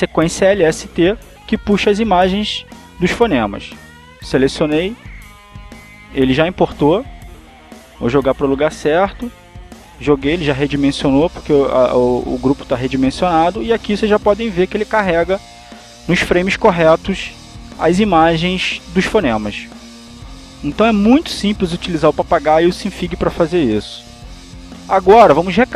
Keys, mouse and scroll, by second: 1.3 click, 3.0 click, 4.2 click, 5.4 click, 6.9 click, 8.7 click, 10.7 click, 13.6-21.3 drag, 21.7 click, 22.4 click.